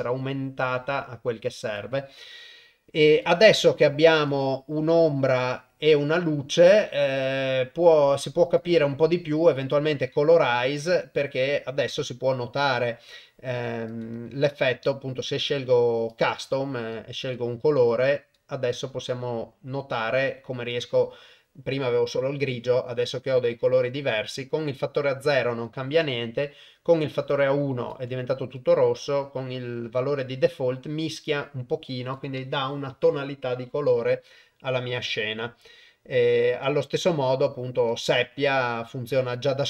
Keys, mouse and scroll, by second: 3.1 click, 4.3-6.6 drag, 8.5-9.7 drag, 11.9-14.0 drag, 16.2 click, 24.2-28.0 drag, 28.6-32.1 shift+drag, 36.5-38.1 drag, 39.4 click.